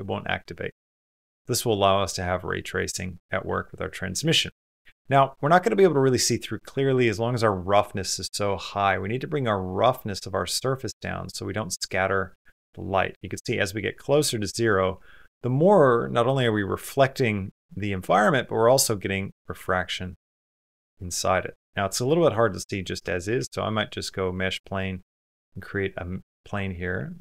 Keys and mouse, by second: 0.9 middle click, 4.1 click, 4.7 middle click, 4.8-5.9 drag, 15.8-17.1 middle drag, 17.6-19.0 middle drag, 20.8 middle click, 22.0 shift+middle click, 23.2 shift+a, 24.6 click.